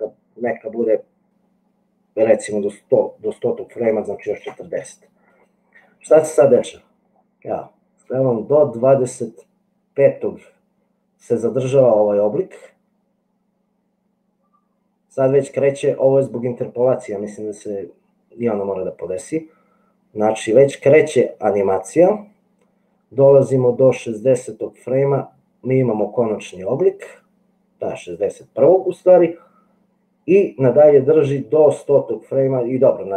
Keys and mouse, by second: 7.5-19.6 drag, 19.6 middle click, 20.1 click, 20.2 middle click, 20.3-25.8 drag, 25.8-27.3 middle drag, 27.3-30.9 drag, 30.9-33.1 middle drag.